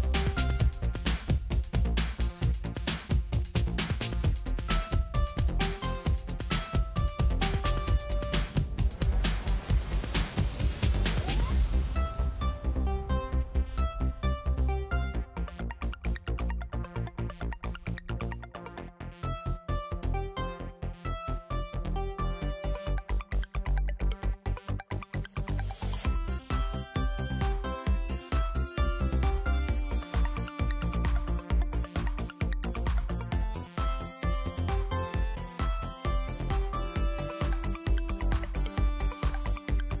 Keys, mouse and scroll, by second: 0.4 click, 3.7 click, 5.0-7.4 drag, 8.2-10.3 drag, 10.7 click, 14.4 click, 16.1 click, 17.0 click, 18.3 click, 20.4 click, 22.1 click, 24.5 click, 28.6 click, 30.1 click, 32.9 click, 37.1 click, 38.3-40.0 drag.